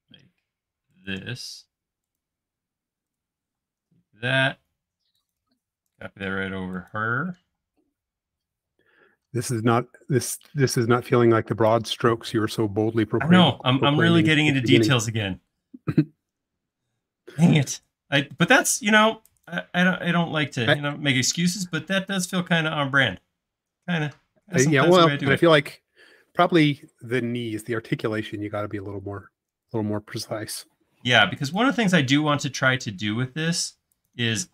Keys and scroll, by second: 2.8 space, 3.5 m, 7.6 space, 12.1 l, 18.0 space, 18.4 e, 20.8 super+z, 21.9 space, 32.1 m.